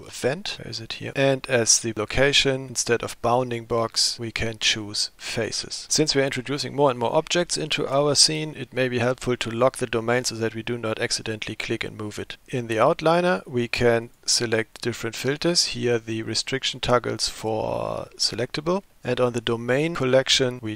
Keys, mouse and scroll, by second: 4.0-5.9 drag, 14.1-18.9 drag.